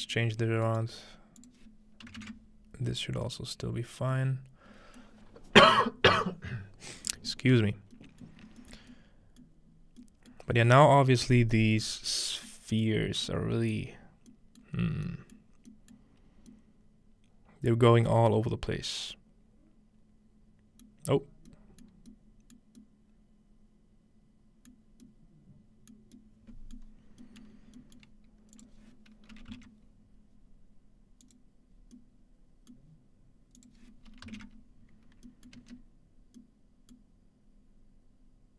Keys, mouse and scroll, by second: 3.9-4.9 scroll down 1, 4.1-6.7 middle drag, 4.9 scroll down 1, 8.2 shift+middle click, 8.8 shift+middle click, 9.8 shift+middle click, 9.8-11.5 scroll up 1, 10.4 middle click, 11.2 middle click, 12.0 middle click, 12.1-13.2 scroll down 2, 13.9 middle click, 13.9-15.6 scroll up 2, 14.7 middle click, 15.4 middle drag, 15.9 middle click, 16.3-20.1 scroll down 2, 21.2 middle click, 21.2-22.9 scroll down 3, 21.8 middle click, 22.7 middle click, 24.7-25.0 middle drag, 25.9 middle click, 26.8 middle click, 27.0-28.6 scroll down 1, 28.6-30.2 drag, 31.2-32.9 drag, 31.9-33.7 middle drag, 33.6-35.3 drag, 35.6 middle click, 37.0-38.5 middle drag.